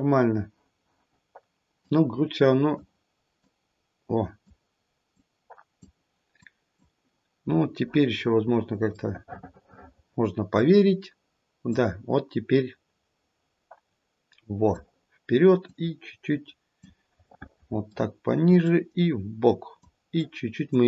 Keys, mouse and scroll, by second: 0.5-1.4 scroll up 1, 1.8 click, 3.4 click, 5.1 click, 6.3 click, 9.0 middle click, 9.3 middle click, 9.6 middle click, 9.9 middle click, 11.7 click, 15.6 click, 17.3 middle click, 18.6 click, 20.1 click.